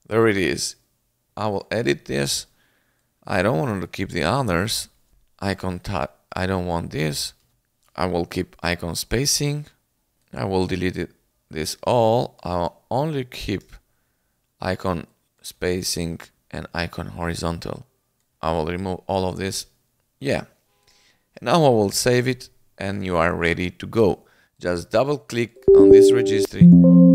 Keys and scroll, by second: 5.1 Return, 6.8 Return, 10.1 Delete, 12.3 Delete, 13.6 BackSpace, 15.4 Delete, 15.8 BackSpace, 18.3 Delete, 18.7 BackSpace, 21.8 ctrl+s.